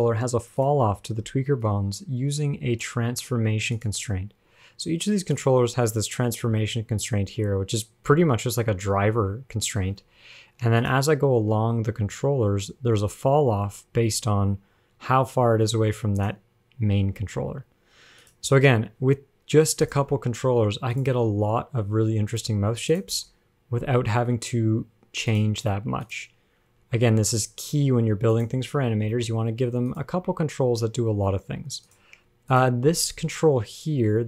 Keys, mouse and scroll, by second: 2.1 shift+click, 4.0 click, 5.6 click, 7.3 scroll up 1, 7.5 scroll down 1, 7.7-8.5 scroll down 2, 8.5 scroll up 2, 8.8 scroll down 4, 9.7 scroll up 2, 11.1 click, 12.4-13.4 scroll down 47, 14.4-16.4 scroll up 8, 17.5 click, 17.5 g, 18.7-19.4 scroll down 3, 20.3 click, 21.2 click, 21.9 g, 23.2 click, 23.9 g, 26.3 click, 27.1 g, 28.9 scroll down 2, 29.4 shift+middle click, 30.1 click, 30.8 g, 32.7 click.